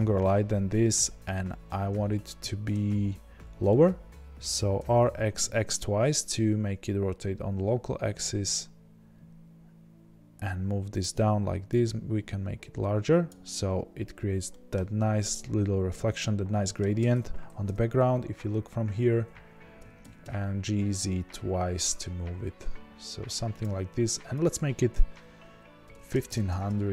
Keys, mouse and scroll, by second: 0.0 scroll down 2, 0.2-4.8 middle drag, 4.8 r, 11.0 click, 14.4-17.6 middle drag, 17.6 KP_0, 18.6-19.8 scroll down 1, 19.8 g, 23.6 click, 26.4-26.9 drag, 26.4 KP_0.